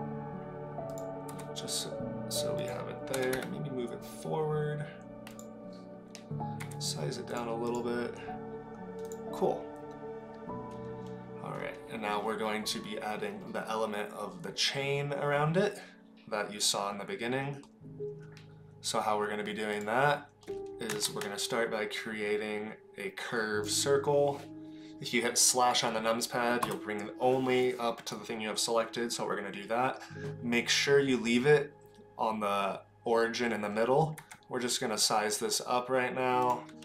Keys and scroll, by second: 1.4 s, 3.1 g, 6.6 s, 21.0 shift+a, 26.6 KP_Divide, 34.3 s.